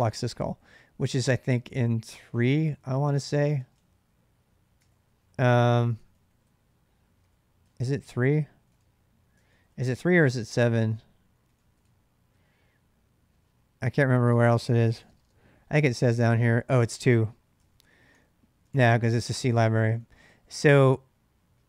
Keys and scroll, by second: 0.5-12.1 typing, 3.5 Return, 14.0 space, 14.4 space, 14.9 space, 15.1-15.8 space, 16.9-21.6 typing, 18.5 ctrl+c, 19.0 ctrl+[.